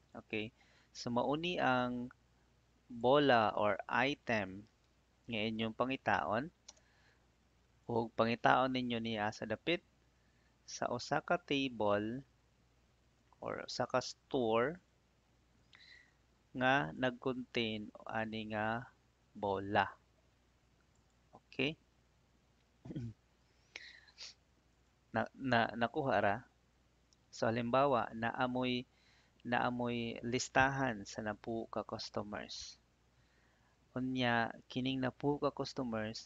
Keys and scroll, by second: 4.3 shift+i, 4.6 t, 6.6 Return.